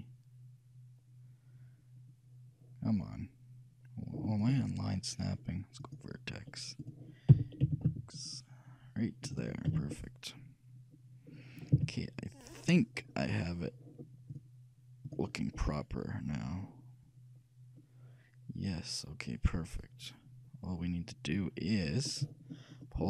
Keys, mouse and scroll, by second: 5.9-7.9 drag, 7.4 g, 9.8 a, 10.1-11.8 middle drag, 11.9 z, 13.3 middle click, 14.4-16.3 drag, 15.6-17.5 middle drag.